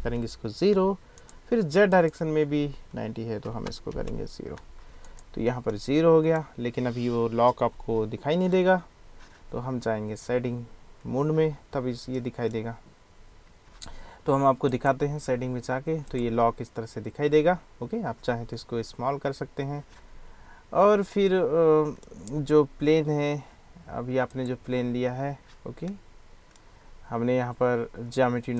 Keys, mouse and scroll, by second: 1.9-5.2 drag, 3.4 BackSpace, 3.9 0, 5.8 drag, 5.9-6.4 middle drag, 8.3-11.8 middle drag, 12.0 middle click, 12.4 middle click, 21.3 click, 21.5-22.1 middle drag, 24.3 click, 26.0-26.6 drag.